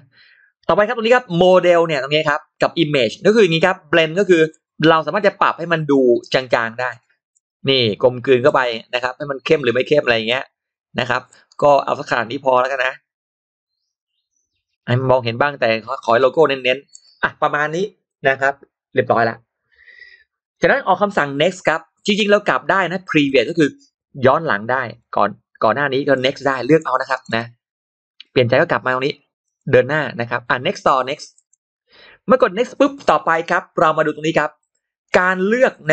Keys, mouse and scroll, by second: 4.3-7.2 drag, 8.3-10.1 drag, 11.1-16.8 drag, 24.8 shift+click, 24.8 shift+x, 25.6 shift+x, 26.0 shift+click, 27.0 shift+right click, 27.2 click, 27.2 shift+x, 28.1 click, 28.2 right click, 28.2 shift+x, 29.3 click, 29.3 right click, 31.2 click, 31.2 right click, 32.4 click.